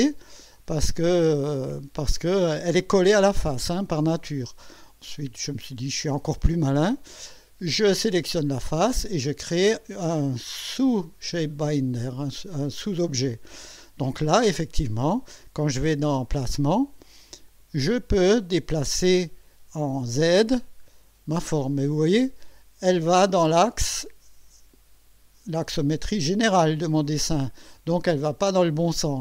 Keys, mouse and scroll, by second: 5.2 click, 8.3 click, 12.1 click, 13.3 scroll down 1, 14.8 click, 16.8 click, 17.5 click, 20.2 click, 20.8 scroll up 1, 21.4 scroll up 1, 23.1 scroll up 2, 27.5 scroll up 1.